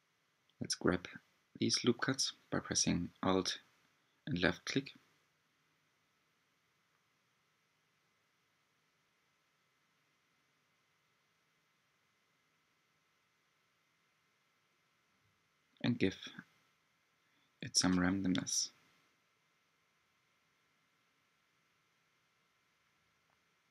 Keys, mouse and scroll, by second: 0.9 click, 4.4 g, 6.3 click, 6.6 g, 9.2 alt+click, 10.0 g, 11.3 shift+middle click, 12.2-12.5 scroll up 1, 13.3 alt+click, 14.1 g, 15.3-17.1 shift+middle drag, 17.1 alt+click, 18.1 alt+click, 19.1 g, 20.3-22.2 shift+middle drag, 22.2 alt+click, 23.3 g.